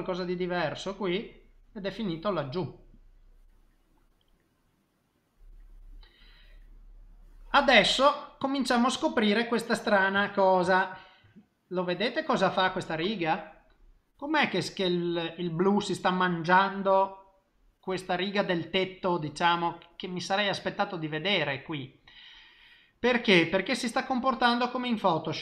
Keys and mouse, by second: 0.3 click, 0.6 click, 1.1 middle click, 2.9 click, 3.8 middle click, 10.2 shift+middle click, 10.7 ctrl+middle click, 11.3 middle click, 14.0 middle click, 15.8 middle click, 16.9 middle click, 18.5 middle click, 21.1 middle click, 23.7 middle click.